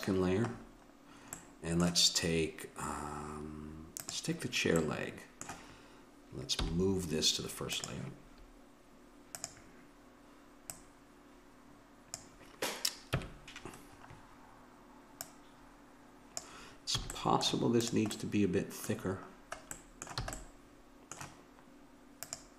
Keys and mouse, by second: 4.0-5.6 drag, 6.6 m, 9.3-12.6 drag, 13.2 KP_1, 15.2 click, 17.0 a, 17.9-19.5 drag, 20.3 a, 22.2-22.5 drag.